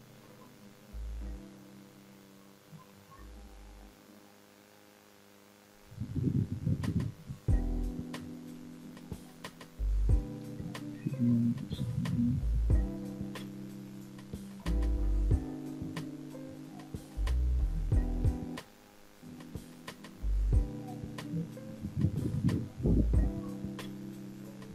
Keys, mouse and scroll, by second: 1.0 f, 1.5-3.2 middle drag, 3.4 shift+z, 3.9 shift+z, 4.2 shift+middle click, 4.8 middle click, 5.6-6.4 scroll up 1, 6.4 f, 7.0-8.3 middle drag, 8.7-9.1 scroll up 1, 9.5-10.0 shift+middle drag, 10.3-11.4 middle drag, 12.0-12.4 middle drag, 13.2 click, 13.8 shift+click, 14.3 shift+click, 15.6 ctrl+z, 16.8 shift+click, 17.8 shift+click, 19.0 f, 19.6-20.9 middle drag, 21.3 click, 22.0 shift+click, 22.7 shift+click, 23.5 shift+click, 24.2 f.